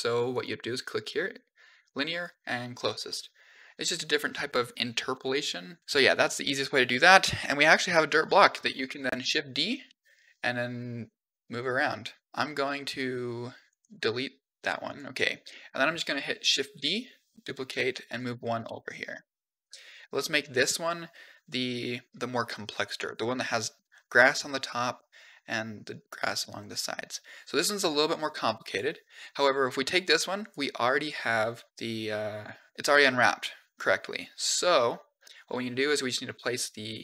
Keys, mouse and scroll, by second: 0.1-2.2 drag, 2.9-3.4 middle drag, 5.0 click, 6.5-6.9 middle drag, 7.1 scroll down 4, 7.3-8.4 middle drag, 9.1 shift+d, 12.3 g, 13.8 x, 14.4 middle drag, 14.8 click, 15.2 middle drag, 16.6 shift+d, 18.6-18.9 shift+middle drag, 19.0 scroll up 4, 22.1-22.9 scroll down 5, 26.1-26.4 middle drag, 27.9 click, 29.7 click, 30.2 click, 31.6 u, 34.7 click.